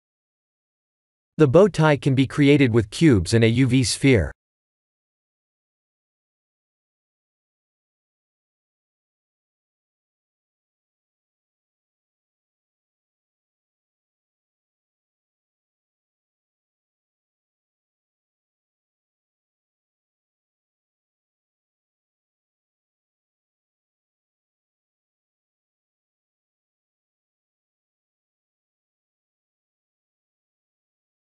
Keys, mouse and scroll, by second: 0.6 middle click, 1.8 click, 2.6 shift+a, 7.5-8.4 scroll up 3, 8.4-9.2 scroll up 1, 8.4 KP_1, 9.2 s, 11.0 shift+middle click, 13.2 g, 15.7 right click, 16.4 click, 16.8 shift+a, 21.7 Tab, 22.2 Tab, 22.7 shift+z, 23.0 Tab, 23.4 3, 23.7 click, 24.7 click, 25.2 s, 27.1 Tab, 27.8 ctrl+3, 28.3 Tab, 28.7 ctrl+r, 29.9 ctrl+r, 30.8 Tab.